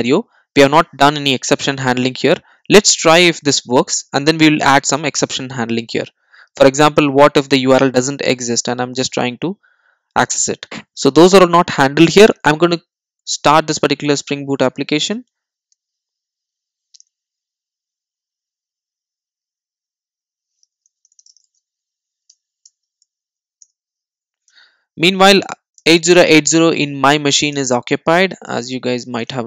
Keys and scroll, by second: 2.7 super+s, 3.7 super+s, 25.6 ctrl+shift+super+o.